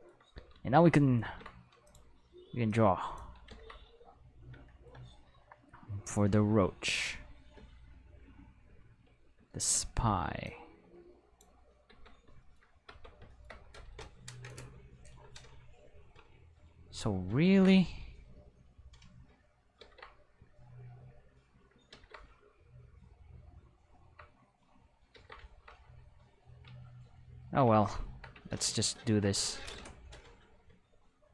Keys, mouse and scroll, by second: 1.2 ctrl+Tab, 1.8 click, 2.7 click, 3.5 ctrl+z, 10.4 click, 11.9 Tab, 12.9 Tab, 16.5 click, 17.4 ctrl+z, 18.3 click, 19.8 ctrl+z, 21.0 click, 21.9 ctrl+z, 24.3 click, 25.1 ctrl+z, 26.2 click, 29.4 q.